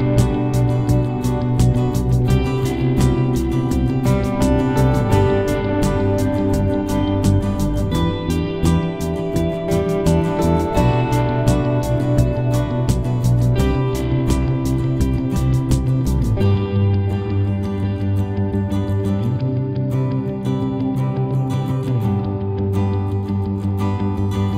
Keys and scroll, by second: 7.8 8, 8.1 7, 9.2 Return.